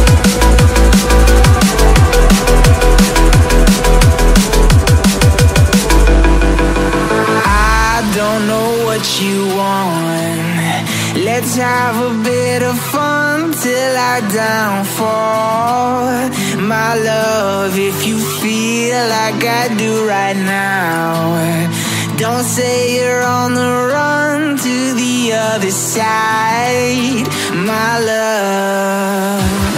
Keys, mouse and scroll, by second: 1.1 Tab, 3.5 Tab, 4.6 click, 5.1 a, 5.7 click, 6.6 b, 8.6-10.4 drag, 10.4 ctrl+z, 12.2 b, 13.4 b, 15.0-18.6 drag, 19.6-20.9 scroll up 6, 20.9 Tab, 21.5-22.2 scroll down 3, 22.2-23.2 shift+middle drag, 23.2 Tab, 23.9 Tab, 25.1 z, 25.8 Tab, 26.1 click, 26.6-27.3 scroll down 1, 27.3 click, 27.8 Tab, 28.7 click.